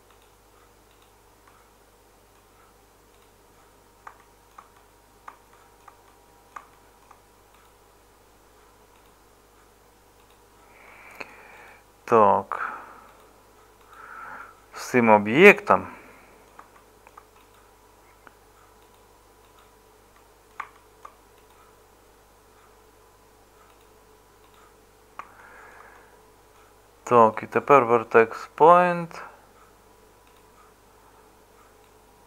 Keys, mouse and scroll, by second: 15.5-16.5 middle drag.